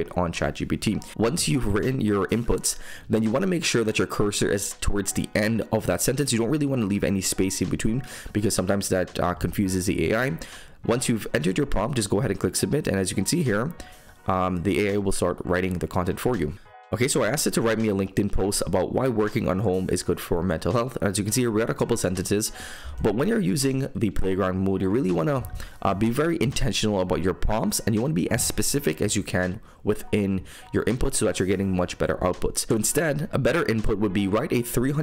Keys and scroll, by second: 1.1 super+m, 1.5 super+m, 2.9 super+m.